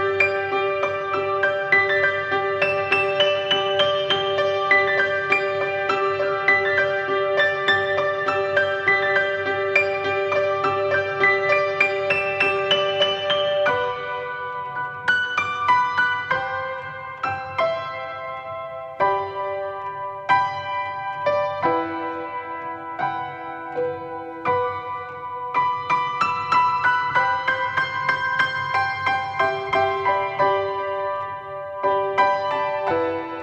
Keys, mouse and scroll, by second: 0.0 click, 0.3 g, 0.6 click, 2.0 click, 2.0 KP_1, 2.3 click, 3.1 click, 3.1-6.9 typing, 3.9 click, 4.4 click, 4.5-5.0 scroll down 1, 5.3 click, 5.5 alt+r, 6.1 click, 7.3 click, 8.2 scroll up 1, 8.9-10.7 drag, 11.0 click, 11.0 KP_0, 11.3-11.8 scroll down 1, 12.1 alt+a, 12.6 shift+a, 12.8 s, 13.0 click, 13.3 alt+d, 13.7 click, 14.1-14.9 right drag, 14.1 scroll down 1, 14.4 x, 14.9-15.2 scroll up 1, 15.2 click, 15.5 g, 16.4 click, 16.5 scroll down 1, 16.9 Tab, 17.3 2, 17.3 click, 17.9 e, 18.3 click, 18.9 shift+click, 19.3 ctrl+b, 20.9 shift+click, 20.9 Tab, 21.2-22.3 right drag, 21.4 alt+a, 21.7 KP_0, 22.3 click, 22.9 g, 23.2 click, 23.4 g, 24.6 click, 26.0 click, 26.3 alt+a, 26.4 scroll up 1, 27.0 scroll down 1, 27.6 click, 30.1 click, 30.9 click, 31.7 scroll down 1, 32.5 r, 32.9 click.